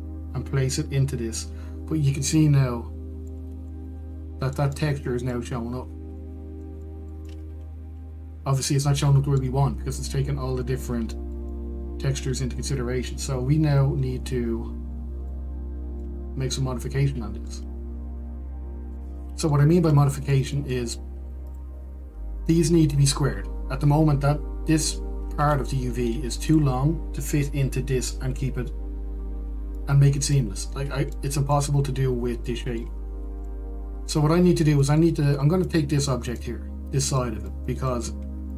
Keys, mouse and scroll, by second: 3.6-4.7 middle drag, 4.7 Tab, 5.1-6.8 middle drag, 7.4-15.8 middle drag, 16.6-22.4 middle drag, 22.4 Tab, 22.8 click, 26.7 Tab, 27.8 click, 31.1 middle click, 32.4-34.3 middle drag, 34.7-36.5 middle drag, 37.0 click, 37.6-38.5 middle drag.